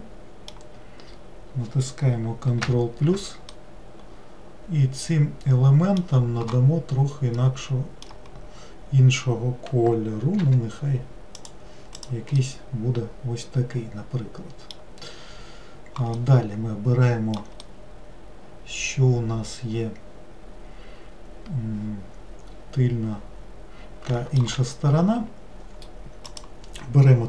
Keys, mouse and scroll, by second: 2.7 ctrl+KP_Add, 3.5-6.6 middle drag, 7.4-10.4 middle drag, 10.4 g, 12.0 click, 12.4-15.5 middle drag, 16.2-20.7 middle drag, 26.3 click.